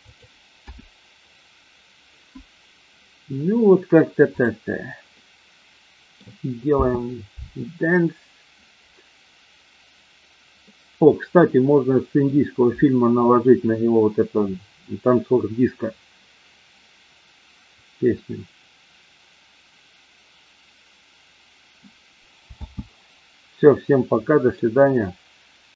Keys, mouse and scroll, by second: 0.6 KP_0, 5.1-6.1 middle drag, 6.8 space, 10.6-12.3 middle drag, 22.6 space, 23.8-24.6 middle drag.